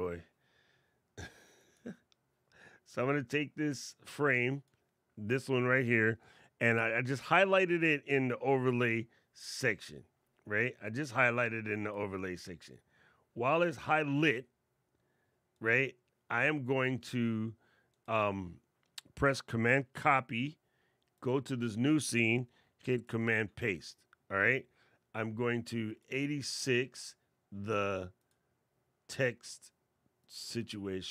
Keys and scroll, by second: 19.7 super+c, 22.8 super+v.